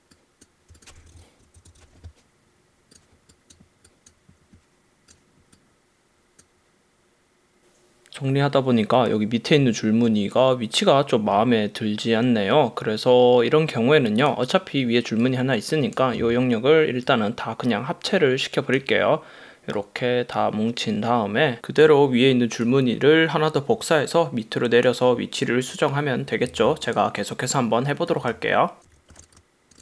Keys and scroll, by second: 0.7 space, 1.0 super+-, 1.5 super+=, 26.6 v, 28.9 super+z, 29.2 shift+super+g.